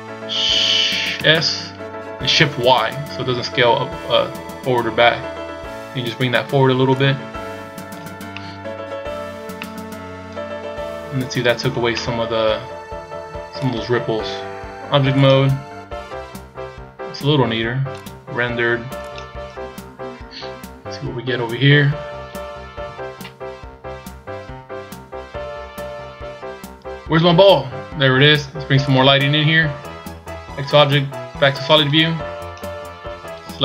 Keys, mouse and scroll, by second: 8.4 middle click, 9.3 scroll down 1, 9.6 middle click, 12.0 middle click, 13.6 click, 15.8-16.4 scroll down 3, 17.9 click, 19.1 scroll down 2, 20.6-21.3 scroll down 1, 21.3 scroll down 2, 22.0-22.7 scroll down 3, 22.7 KP_1, 24.2-25.2 scroll down 1, 29.7 click, 32.9-33.6 scroll down 3.